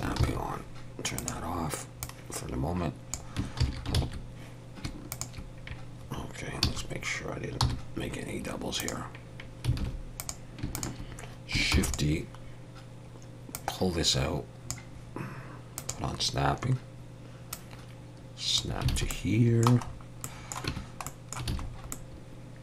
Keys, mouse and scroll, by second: 0.2 ctrl+z, 1.2 click, 2.0 click, 3.6 ctrl+z, 3.9 ctrl+z, 5.1 shift+click, 6.6 a, 7.6 m, 9.8 alt+a, 10.2 click, 10.7 shift+click, 11.7 shift+d, 13.5 click, 15.8 click, 18.8 click, 18.9 alt+a, 19.1 middle click, 19.9-20.4 scroll up 2, 20.2 middle click, 20.7 Tab, 21.1 middle click, 21.5 alt+a, 21.7-22.0 scroll up 2, 21.9 middle click.